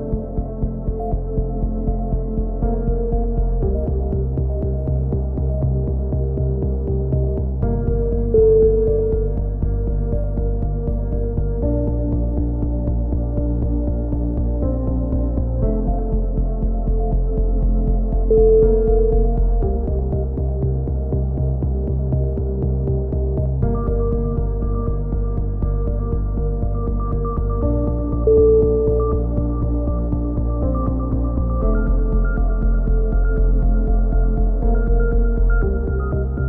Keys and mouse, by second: 0.5 ctrl+r, 1.8 a, 2.1 ctrl+r, 3.1 a, 3.5 c, 3.8 right click, 4.2 g, 5.8 a, 7.0 z, 7.2 z, 10.3 z, 10.5 click, 12.8 click, 13.3 right click, 13.5 x, 14.0 a, 14.1 a, 14.2 click, 15.3 KP_3, 15.4 z, 15.8 z, 16.3 z, 17.6 click, 17.8 click, 18.1 right click, 18.6 click, 18.6 a, 18.9 ctrl+z, 19.2 click, 19.8 e, 20.1-24.0 drag, 24.0 a, 24.6 z, 24.8 click, 25.6 z, 25.7 click, 26.3 ctrl+z, 26.5 ctrl+z, 27.2 ctrl+z, 27.2 right click, 28.2 right click, 28.7 e, 29.0 click, 29.6 a, 29.8 click, 31.7 right click, 32.3 click, 33.2 e, 33.6-34.7 drag, 34.1 a, 34.2 Tab, 35.9 KP_3, 36.3 Tab, 36.3 z.